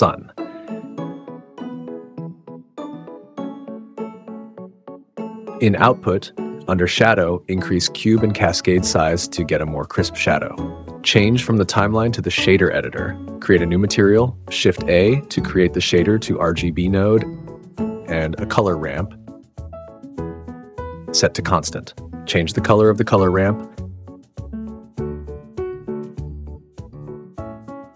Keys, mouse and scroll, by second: 0.0 shift+a, 3.0 g, 3.1 z, 5.6 click, 7.8 click, 13.3 click, 14.8 shift+a, 14.9 click, 15.1 click, 15.3 shift+a, 18.2 shift+a, 21.1-21.6 drag, 22.3-23.7 drag, 24.1 click, 24.5-25.8 drag, 26.0-27.9 drag.